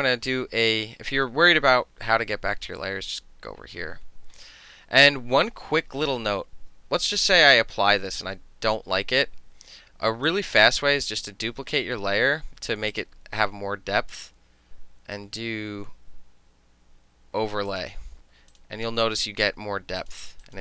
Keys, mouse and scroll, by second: 3.2 click, 10.3-11.9 drag, 13.0 click, 17.8 click, 18.6 click, 19.1 click, 20.1 click, 20.5 click.